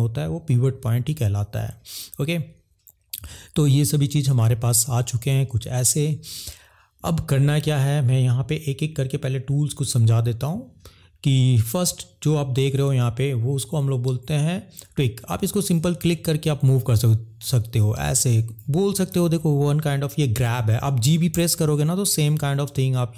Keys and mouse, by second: 12.7-14.9 drag, 15.7 click, 19.2 ctrl+z, 21.3 g.